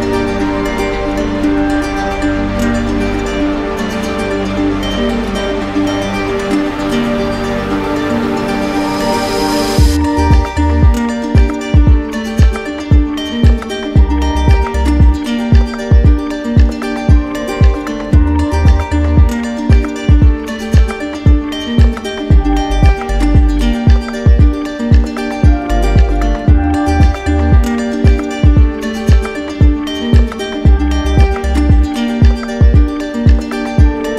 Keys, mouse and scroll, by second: 1.1 alt+click, 1.7 click, 2.1 shift+click, 2.1 shift+click, 2.9 alt+click, 3.6 click, 4.1 alt+click, 5.5 alt+click, 6.6 alt+click, 7.9 alt+click, 8.7 alt+click, 9.4 click, 11.4 z, 12.9 click, 15.2 alt+click, 16.2 click, 17.0 click, 18.1 alt+click, 19.6 alt+click, 20.4 click, 21.1 click, 22.4 alt+click, 22.6 alt+click, 23.2 click, 25.6 click, 26.1 alt+click, 26.6 click, 28.6 alt+click, 32.2 click, 33.1 click, 34.1 alt+click.